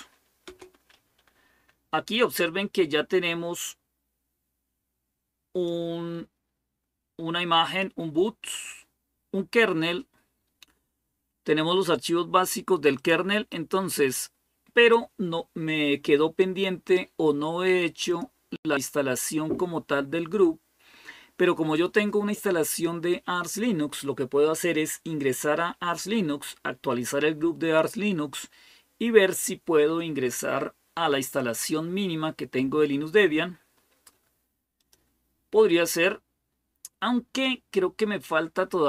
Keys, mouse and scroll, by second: 0.0-0.3 typing, 1.7-2.4 typing, 5.5-7.6 drag, 12.8-15.1 drag, 17.9 click, 19.8-20.5 scroll up 1, 20.5-26.3 scroll up 1, 34.6 click, 35.1 click.